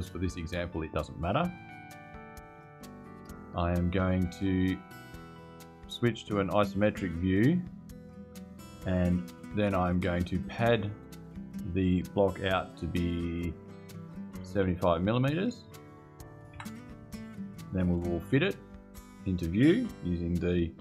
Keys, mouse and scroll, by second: 2.6 click, 5.9 click, 10.1 click, 14.2 KP_7, 14.4 KP_5, 16.3 KP_Enter.